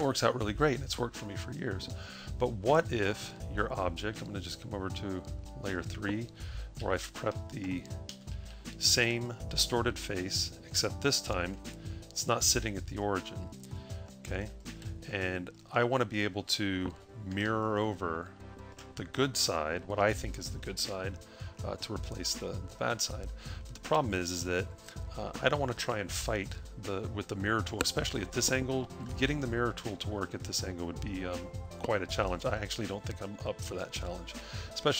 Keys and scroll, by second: 7.8-9.3 typing.